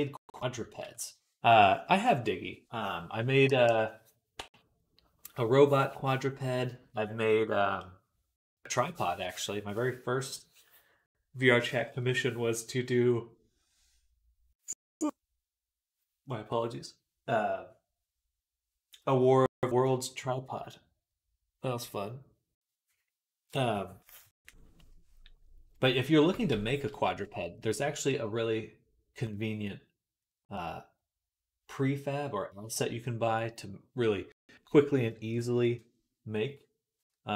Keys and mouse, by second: 0.7 ctrl+s, 26.4 shift+c.